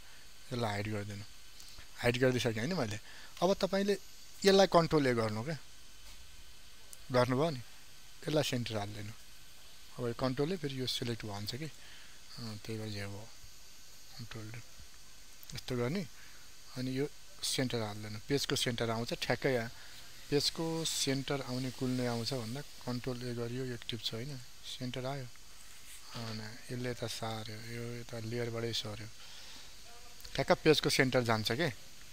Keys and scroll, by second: 4.4 ctrl+a, 14.4 ctrl+d, 23.0 ctrl+a, 28.4 ctrl+z.